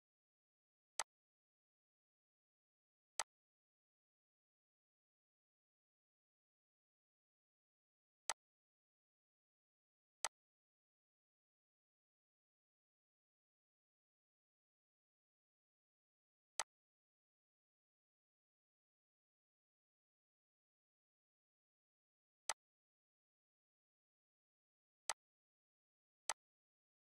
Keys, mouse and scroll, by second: 0.9 click, 8.3 click, 16.6 click, 21.1 scroll down 1, 22.5-23.9 drag, 23.9 right click, 25.1 click.